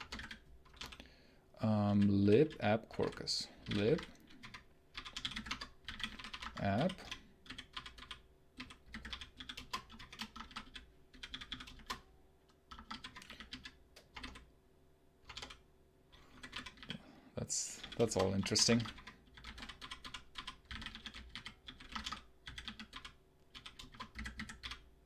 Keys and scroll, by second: 0.0-0.6 typing, 1.7-14.0 typing, 15.2-25.0 typing.